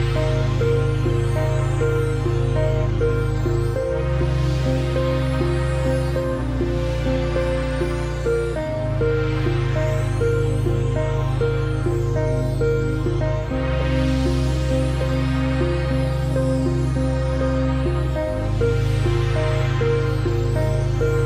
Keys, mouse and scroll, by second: 1.2 click, 3.3 click, 6.9 click, 7.9 shift+h, 8.8 click, 9.7 alt+Tab, 11.2-12.5 alt+scroll down 6, 12.9 alt+click, 14.6-15.2 alt+scroll up 2, 15.2 space, 15.3 click, 15.4 space, 15.9 click, 16.4 alt+scroll up 1, 16.6 click, 16.9 space, 17.5 alt+scroll up 1, 17.7 click, 18.5 ctrl+2, 19.0 alt+scroll up 1, 19.1 space, 19.2 click, 19.4 space.